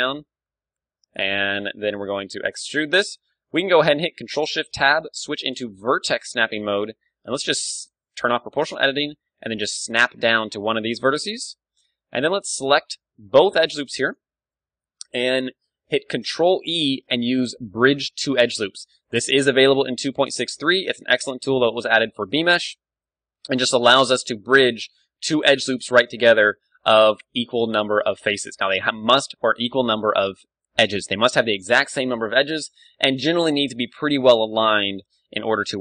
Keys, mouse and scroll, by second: 0.1-1.8 drag, 0.1 KP_1, 1.2-3.3 middle drag, 1.9 e, 2.9 click, 3.7-5.2 middle drag, 4.4 ctrl+shift+Tab, 7.1 g, 8.0-10.2 right drag, 8.3 o, 9.1 g, 10.2-12.0 drag, 10.4 z, 11.7-13.0 middle drag, 14.0 right click, 14.3 z, 14.5-16.3 middle drag, 16.4 ctrl+e, 19.8-25.0 middle drag, 20.5 z, 22.2 z, 27.0 a, 27.2 Tab, 27.5 KP_1, 28.0-30.3 middle drag, 33.3-34.9 drag, 33.8 Tab, 34.6 ctrl+r.